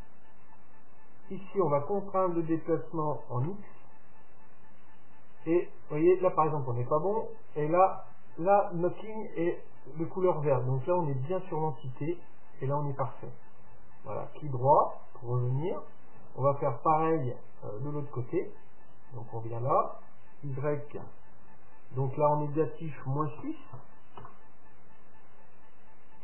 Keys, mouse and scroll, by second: 14.8-17.0 middle drag, 17.3-19.1 drag.